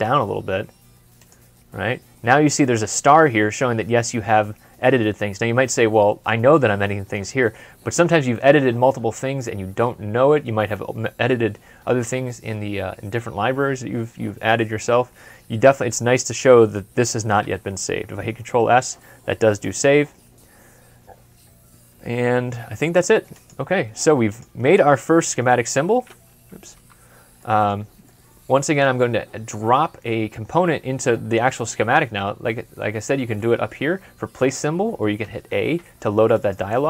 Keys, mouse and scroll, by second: 18.3 ctrl+s, 24.8 ctrl+s, 24.8 scroll up 1, 25.5 scroll down 1, 26.6 Escape, 27.3 middle click, 29.6 scroll up 1, 30.1 scroll down 1, 35.1 a, 36.4 double click.